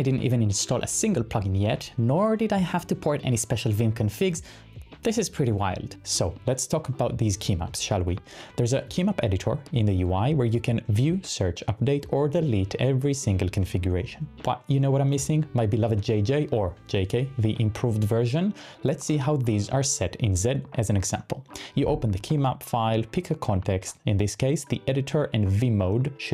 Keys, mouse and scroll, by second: 6.4 shift+super+p, 6.6-7.5 typing, 8.2 Return, 15.9 typing, 17.4 typing, 18.8-22.1 typing.